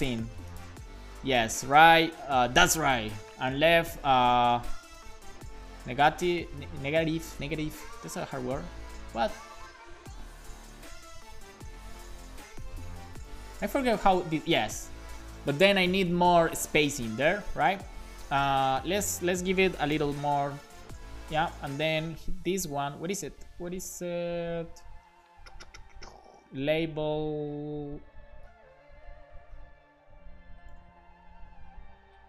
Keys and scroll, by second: 1.8 Up, 2.1 Left, 4.4-6.9 typing, 7.5 super+s, 8.1 Right, 10.1 Left, 10.3 Right, 10.7 BackSpace, 11.5 super+s, 12.8 BackSpace, 13.2 5, 13.6 super+s, 19.2 Left, 19.7 BackSpace, 20.1 super+s.